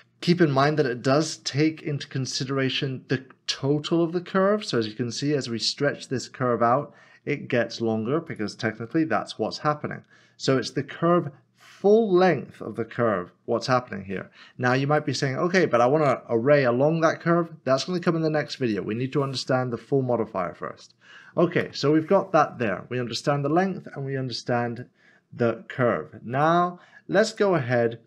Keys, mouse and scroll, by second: 0.2 g, 8.3 click, 8.9 click, 9.1 middle click, 12.9 Tab, 15.0 middle click, 18.0 click, 21.6 click, 24.7 click.